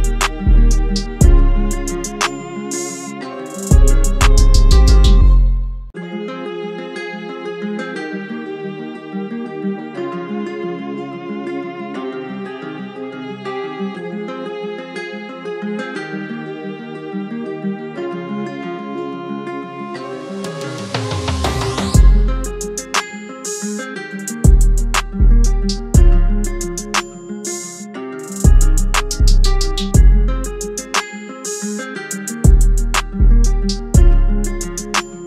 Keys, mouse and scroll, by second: 0.3 Left, 1.0 Right, 2.8 Right, 3.7 ctrl+h, 6.3 alt+shift+click, 7.8 Up, 8.0 Up, 10.7 Up, 10.7 Down, 11.2 Down, 11.9 Return, 13.4 ctrl+h, 14.3 ctrl+h, 15.4 ctrl+h, 15.7 Right, 16.3 Down, 17.3 Down, 17.9 Up, 18.3 Right, 33.0-35.2 scroll down 1.